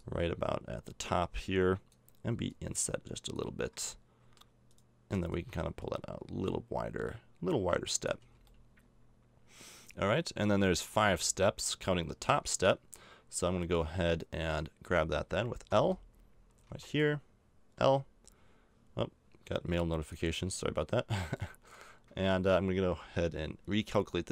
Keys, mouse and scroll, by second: 3.8 click, 4.3 middle click, 4.7-5.8 right drag, 8.2 a, 8.5-9.6 middle drag, 11.4 middle click, 15.7 l, 16.6 a, 17.8 l, 20.6 middle click.